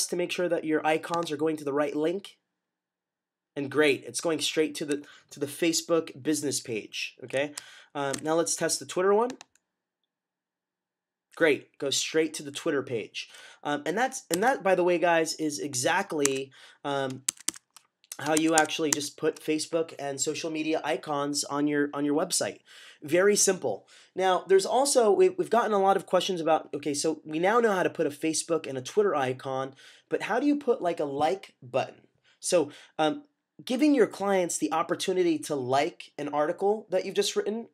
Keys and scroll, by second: 8.0 w, 14.2 w, 16.1 Tab, 17.2 Tab, 18.2 Tab, 18.4 Tab.